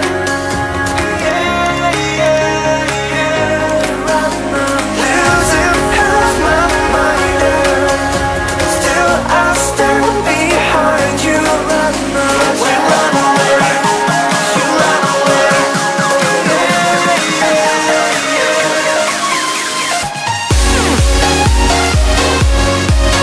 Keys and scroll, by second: 20.6 ctrl+alt+z.